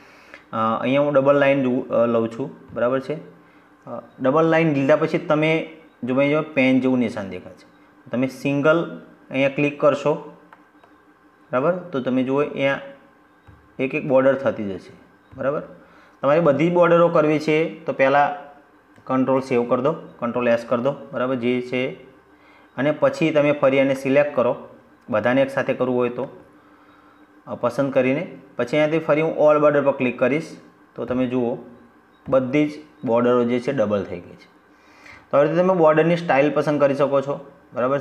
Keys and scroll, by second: 18.2 ctrl+s.